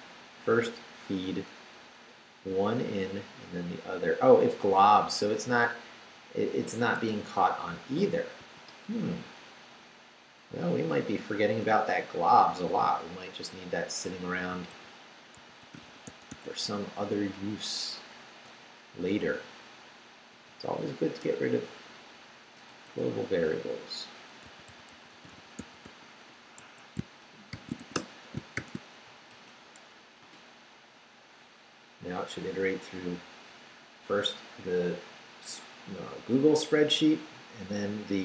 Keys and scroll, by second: 0.0 Down, 4.4 Down, 5.4 Right, 8.4 i, 9.1 BackSpace, 10.5 BackSpace, 14.4-16.8 typing, 17.1 Down, 19.4 Right, 20.5 Right, 21.2 BackSpace, 22.7 BackSpace, 24.2-26.3 typing, 26.6 Escape, 27.5 shift+;, 27.8 shift+w, 27.9 Return, 28.5 shift+;, 29.0 shift+Up, 30.2 Return.